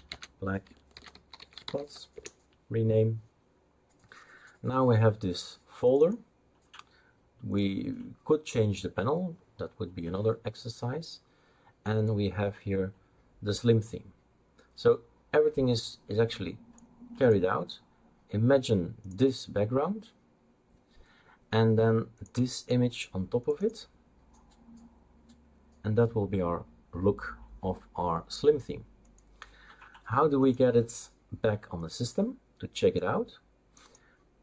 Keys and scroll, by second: 0.0-2.2 typing.